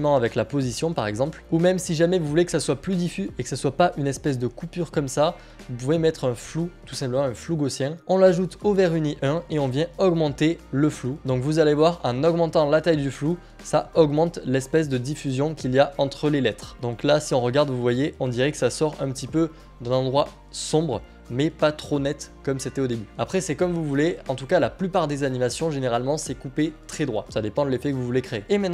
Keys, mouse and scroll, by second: 1.4 click, 2.4 ctrl+z, 2.4 p, 8.0 click, 9.5 click, 9.5 typing, 13.8 click, 18.9 click, 28.4 click.